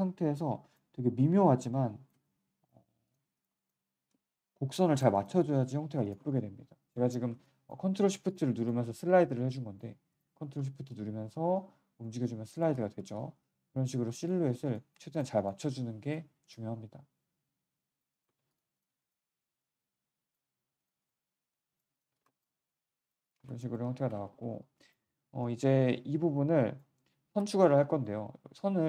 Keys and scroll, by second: 3.7 w, 5.7 3, 7.2 1, 12.9 z, 13.1 z, 16.0 3, 18.2 1, 22.0 3, 23.3 1, 24.2 q.